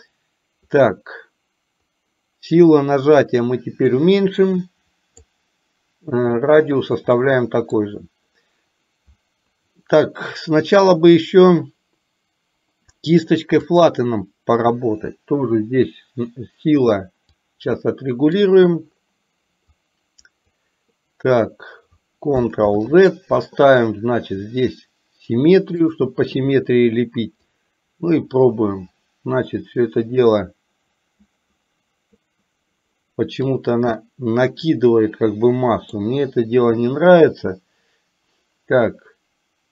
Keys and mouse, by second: 3.3-5.2 drag, 7.2 middle click, 13.8 click, 17.4 click, 19.8 click, 22.7 ctrl+z, 25.9 click, 27.6-33.4 drag, 34.1-35.9 middle drag.